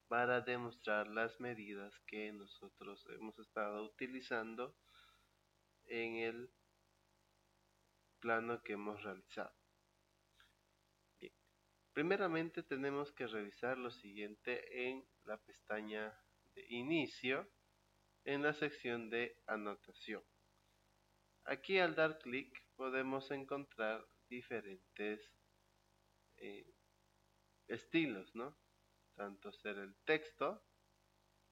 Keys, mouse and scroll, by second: 20.8 click, 22.2 click, 30.0 click.